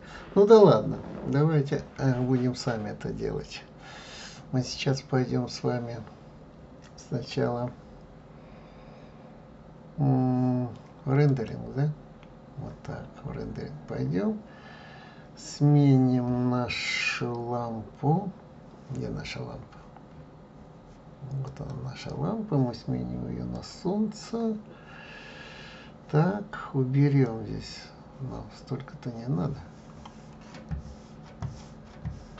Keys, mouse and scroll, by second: 11.8 click, 19.7 scroll down 1, 21.8 click, 23.8 click, 27.5-30.6 drag.